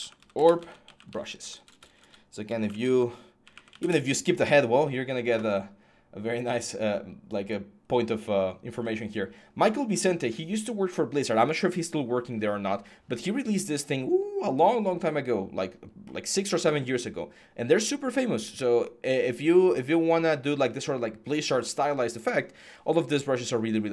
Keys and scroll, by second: 0.0-3.0 typing, 3.6 Return.